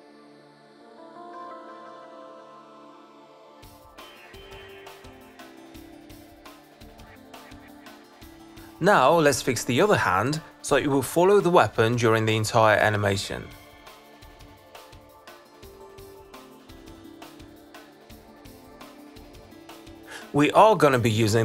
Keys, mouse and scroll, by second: 0.4 click, 2.5 click, 3.5 click, 4.3 click, 4.5 click, 5.8 ctrl+c, 6.6 click, 7.8 ctrl+v, 8.9 click, 14.3 click, 14.7 click, 14.8 click, 15.8 alt+click, 18.6 click, 20.3 click.